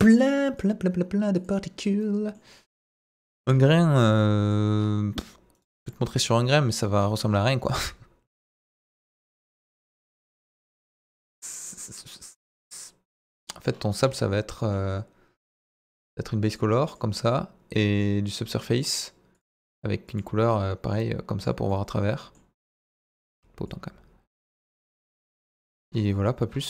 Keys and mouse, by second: 2.0-2.4 middle drag, 3.0 Delete, 3.2 shift+a, 5.6 right click, 6.1 s, 6.7 click, 9.4 s, 10.2 drag, 11.6 click, 13.1 click, 13.4 middle drag, 14.5 middle drag, 18.3 click, 19.3 click, 21.6-22.4 middle drag, 25.1-25.8 middle drag.